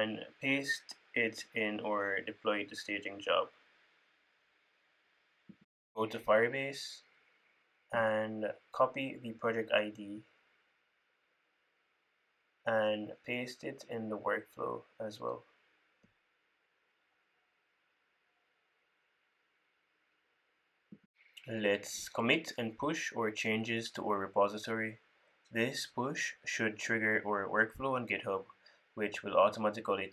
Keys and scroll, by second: 3.4 super+v, 5.0 super+v, 10.4 super+c, 11.9 super+c, 16.9 super+v, 18.4 super+s, 29.2 super+c, 29.7 super+v.